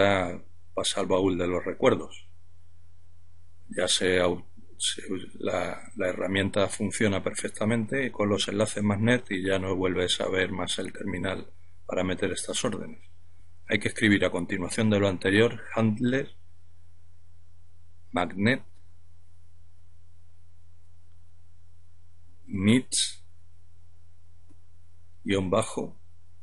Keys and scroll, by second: 11.1-14.3 typing, 15.6-22.1 typing, 23.9 typing, 25.2-26.4 typing.